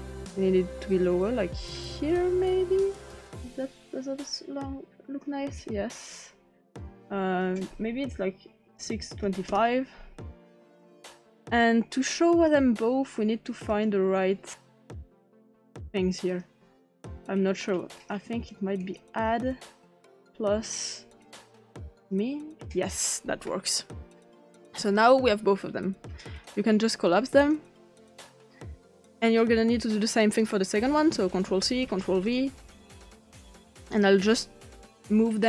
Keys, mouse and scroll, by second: 6.9 click, 8.7-9.2 typing, 9.5 Return, 12.4 click, 13.7 click, 15.1 click, 16.3 click, 17.2-17.6 drag, 17.9 click, 18.8 click, 20.7 click, 21.9 click, 26.4 click, 27.4 click, 30.3 click, 30.9 ctrl+click, 31.5 ctrl+c, 31.9 ctrl+v, 32.3-33.1 drag, 33.9 click.